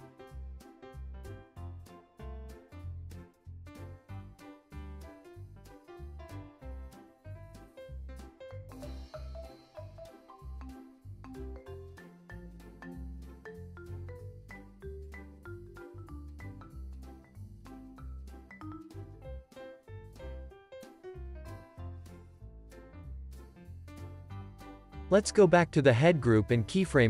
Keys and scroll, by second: 3.9 alt+shift+s, 8.9 z, 14.0 alt+shift+w, 19.4 space, 24.4 space, 25.0 super+s.